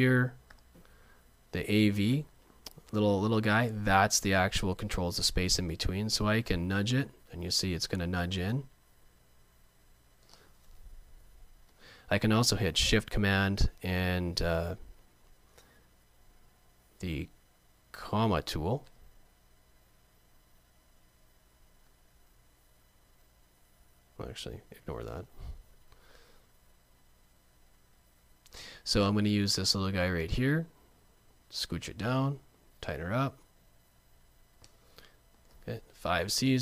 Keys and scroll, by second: 18.9 shift+super+,, 22.2 super+z.